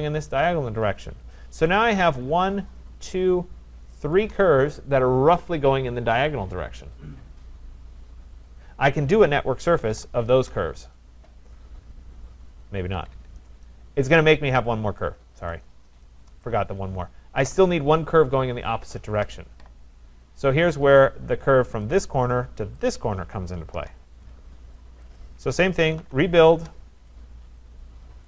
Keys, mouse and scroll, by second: 1.3 click, 2.2 click, 3.1 shift+click, 3.2 shift+click, 4.2 click, 9.4-10.4 typing, 13.0 Return, 13.0 Escape, 13.1 Escape, 14.1 right click, 14.5-15.0 scroll, 15.5 right click, 16.4 right click, 16.8-17.8 scroll, 20.8 click, 21.8 click, 22.9 click, 23.7 Return, 25.2 click, 25.7-26.6 typing.